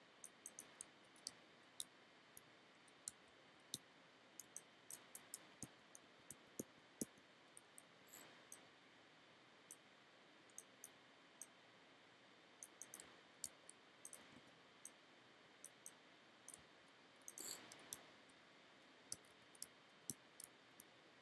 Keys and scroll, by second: 0.8 f, 1.3 g, 3.1 f, 3.8 g, 4.5 space, 5.7 b, 13.1 f, 13.5 g, 14.2 b, 16.6 f, 18.0 g, 19.2 f, 20.1 g.